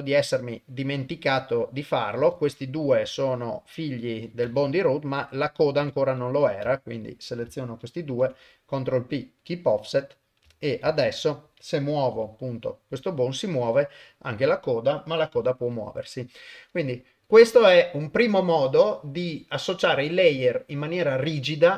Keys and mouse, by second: 4.4 ctrl+Tab, 5.1 click, 5.8 Tab, 6.2 click, 7.0 shift+click, 8.1 ctrl+p, 10.0 click, 10.9 ctrl+Tab, 12.1 r, 14.4 click, 15.3 r.